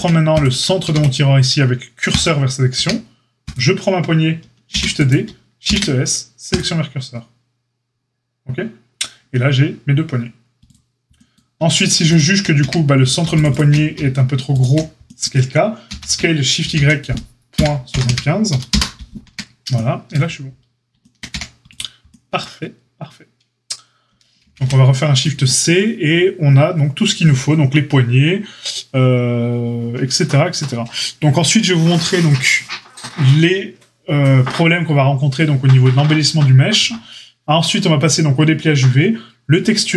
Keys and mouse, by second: 0.8 shift+s, 2.7 Tab, 4.7 shift+d, 5.6 shift+s, 12.1 shift+drag, 12.3-13.3 middle drag, 12.5 Tab, 13.3 click, 13.3 middle click, 13.4 click, 13.5-39.9 middle drag, 15.8 s, 19.2 Tab, 21.2 a, 24.4 shift+c.